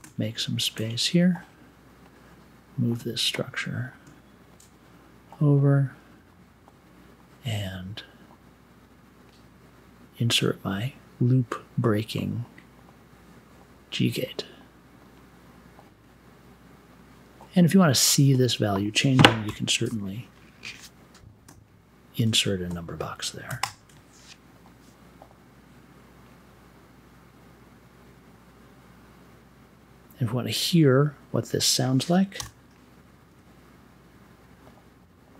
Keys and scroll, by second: 19.4 i, 32.3 m, 33.2 1.